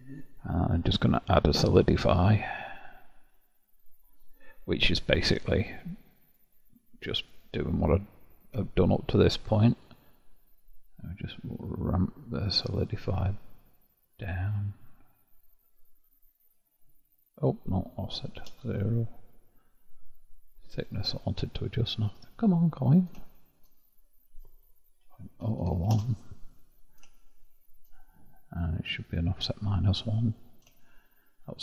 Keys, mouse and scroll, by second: 1.5-4.5 drag, 6.2-7.1 drag, 9.7-25.5 drag, 25.5 0, 29.1-31.6 drag.